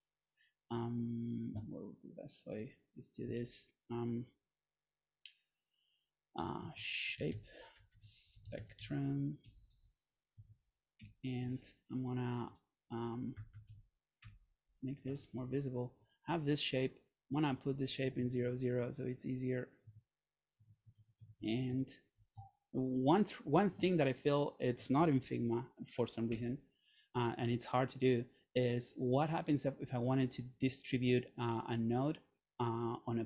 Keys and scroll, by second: 0.5 Escape, 6.5-11.4 typing, 13.5 shift+f, 14.3 Return, 15.5 super+v, 18.3 super+a, 19.9 Tab, 20.8 shift+Tab, 21.0 0, 21.4 Tab, 21.6 0, 21.8 Tab, 25.4 super+/, 26.4 Return.